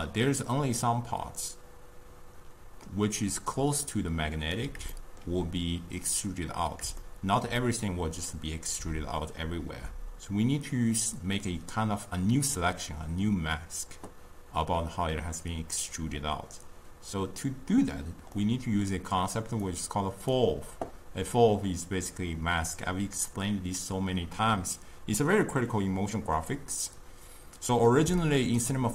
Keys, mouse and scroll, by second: 3.6 d, 3.9 click, 4.6 d, 5.0 d, 5.1-10.1 shift+middle drag, 18.5-19.8 middle drag, 19.8 click, 28.3-28.9 shift+middle drag.